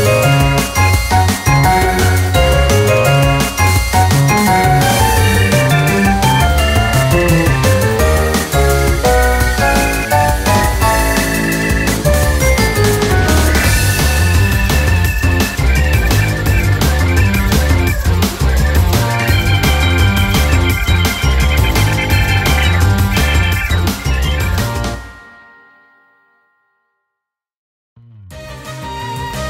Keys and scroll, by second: 1.2 ctrl+t, 4.4-5.3 typing, 5.6 ctrl+-, 6.1 ctrl++, 6.5 typing, 8.8 ctrl++, 12.2 typing, 14.8 ctrl++, 17.5 ctrl+-, 19.8 ctrl+-, 21.0 ctrl++, 24.5 ctrl++.